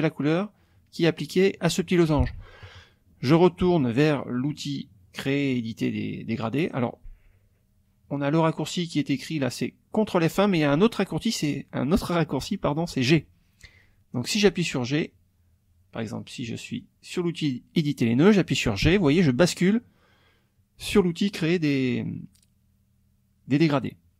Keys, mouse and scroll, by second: 6.4 click, 16.7 click, 18.9 g.